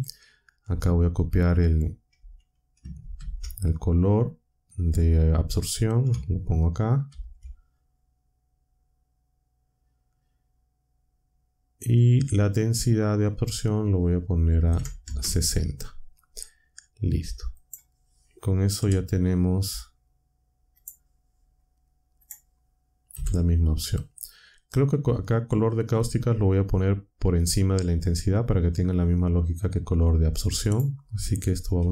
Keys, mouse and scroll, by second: 3.1 ctrl+c, 7.0 ctrl+v, 13.3 click, 14.2-15.1 typing, 17.5 click, 18.7 Delete, 18.8 Delete, 20.7 click, 22.2 click, 23.1 Delete, 30.6 click, 31.7 Tab.